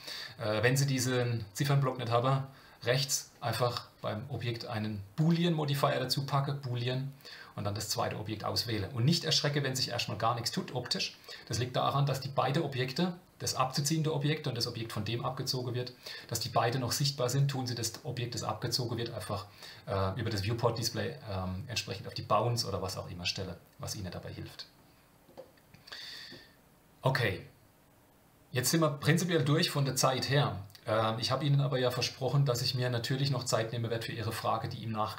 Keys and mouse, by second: 5.3-7.3 drag, 25.5-26.3 middle drag.